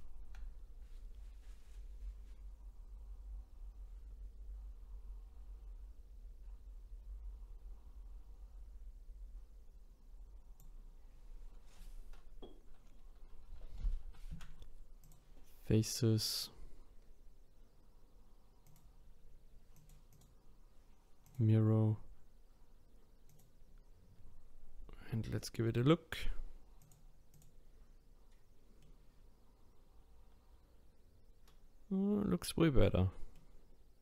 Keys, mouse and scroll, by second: 14.3 Delete, 18.6 click, 19.7 click, 20.1-23.2 drag, 26.8-28.8 drag, 28.8-31.8 middle drag, 32.8-34.0 middle drag.